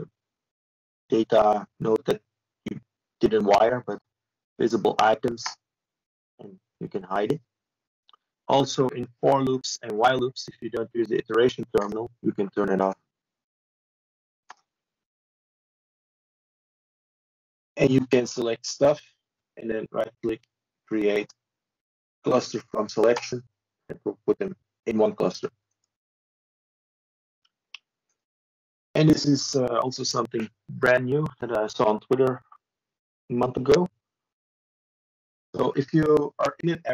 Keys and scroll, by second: 23.4 typing.